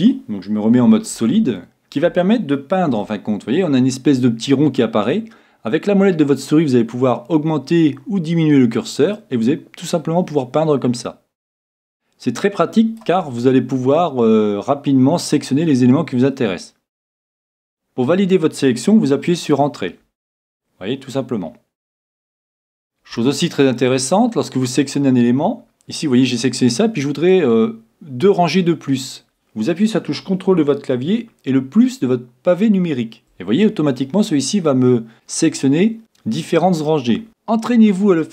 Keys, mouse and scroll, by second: 0.2 a, 0.8 z, 1.2 middle click, 1.6-3.4 middle drag, 2.9 c, 20.4-22.2 middle drag, 22.3-25.9 middle drag, 32.0 c, 37.3-38.3 middle drag.